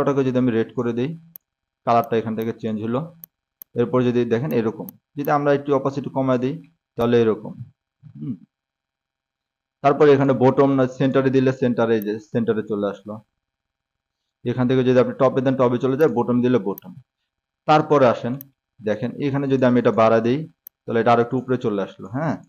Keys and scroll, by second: 4.4-5.3 typing, 7.4 a, 7.7 s, 19.0-20.0 typing.